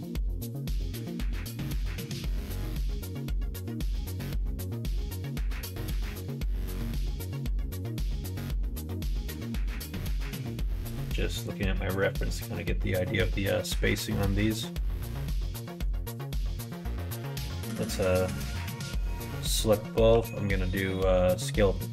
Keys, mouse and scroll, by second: 1.3 a, 2.4 a, 4.1 g, 6.8 alt+z, 7.2 click, 7.6 click, 8.6 g, 13.0 middle click, 15.4 shift+middle click, 17.3 a, 18.1 a, 21.4 middle click.